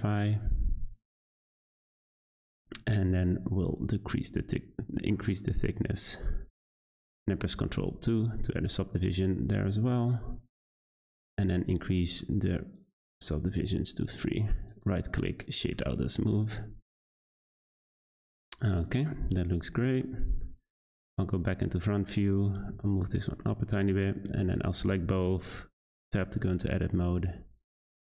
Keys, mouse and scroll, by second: 1.6 click, 2.0-2.4 middle drag, 2.4-3.4 scroll up 1, 3.4-6.5 shift+drag, 7.7 ctrl+2, 10.0-14.1 drag, 14.3 click, 14.6-15.4 right drag, 15.4 click, 15.7-19.0 middle drag, 19.0-19.8 scroll down 2, 19.8-20.2 middle drag, 20.2 `, 22.2 click, 22.5 g, 23.5 click, 24.1-24.7 shift+middle drag, 24.7 Tab, 25.0 a, 25.2 s.